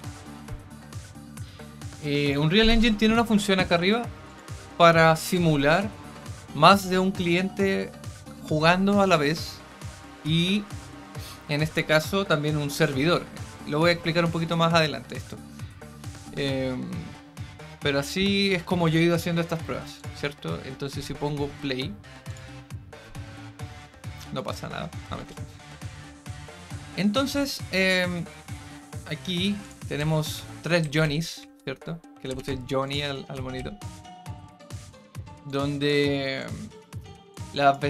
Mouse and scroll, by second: 4.2 click, 19.9 click, 22.2 click, 29.6 click, 32.8 click, 35.4 click, 36.3 click, 37.3 click.